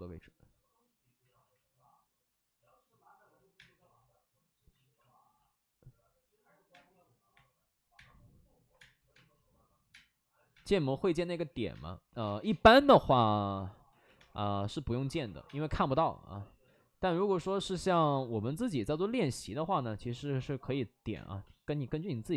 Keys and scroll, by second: 1.1 ctrl+z, 3.5 space, 4.6 ctrl+z, 6.6-8.7 typing, 7.0 ctrl+z, 9.8 space, 10.4 space, 11.6 space, 12.6 3, 12.6 4, 12.8 4, 13.8 ctrl+z, 14.1 3, 15.2 5, 15.3 space, 16.6 ctrl+z, 17.7 ctrl+z, 17.8 space, 19.1 ctrl+z, 21.1 space.